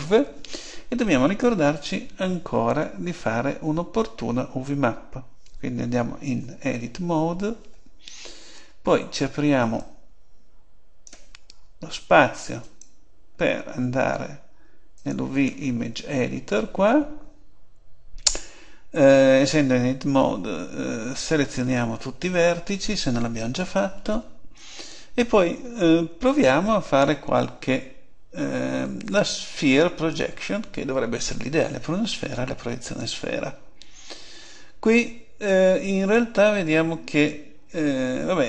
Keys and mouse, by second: 6.2 Tab, 9.8 click, 21.5 a, 21.9 a, 26.2 u.